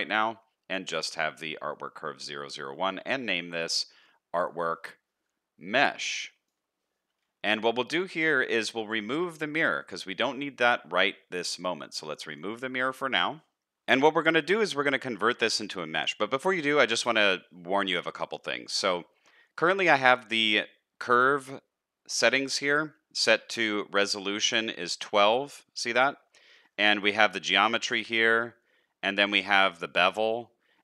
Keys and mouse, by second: 6.9-8.2 drag, 6.9 BackSpace, 18.0 middle click, 19.0 shift+middle click.